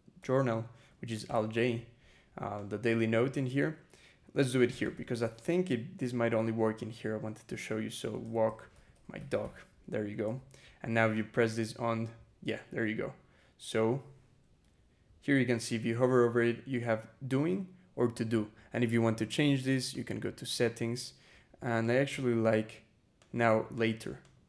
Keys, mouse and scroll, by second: 1.1 alt+j, 1.9 scroll down 2, 2.4 click, 3.2 click, 3.4 Return, 3.7-5.2 typing, 7.7-9.7 typing, 9.9 Return, 11.0 click, 14.4 e, 18.8 click, 19.8 click, 20.7-21.1 scroll down 2, 21.7 click, 23.0 click, 23.6 click, 24.1 click.